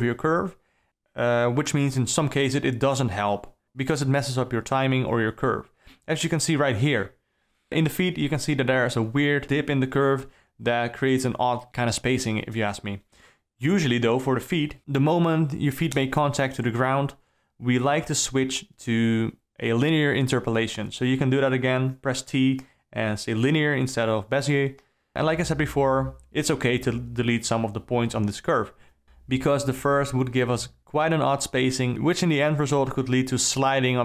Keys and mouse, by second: 0.1 shift+Left, 0.6 ctrl+z, 1.0 ctrl+z, 3.3 r, 4.5 click, 4.6 space, 5.6 KP_0, 6.1 KP_Decimal, 7.7 middle click, 10.6 alt+middle drag, 11.1 middle click, 11.5 ctrl+middle click, 12.7 shift+Left, 13.7 middle click, 15.3 Right, 15.7 Right, 15.9 Right, 16.9 Right, 25.5 alt+a, 26.5 click, 28.9 x, 30.8 x, 31.7 click, 32.2 x, 33.6 shift+Left.